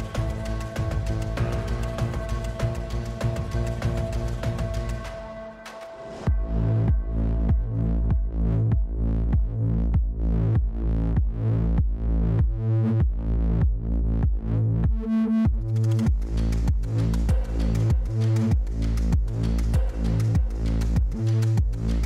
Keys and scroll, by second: 0.2 F11, 0.6 Escape, 9.9 ctrl+c, 10.9 ctrl+v, 13.7-16.3 typing, 18.6-20.2 typing.